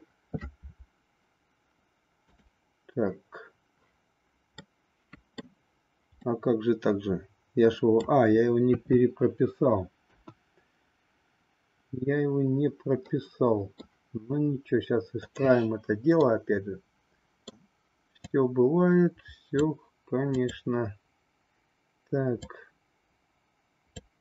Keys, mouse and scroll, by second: 2.2-3.6 drag, 4.7 middle click, 6.2-8.1 middle drag, 8.7 KP_3, 10.1 KP_1, 13.0 middle click, 15.2-16.6 drag, 16.6-17.6 middle drag, 18.2-19.7 drag, 20.3-21.6 drag, 22.4-24.1 drag.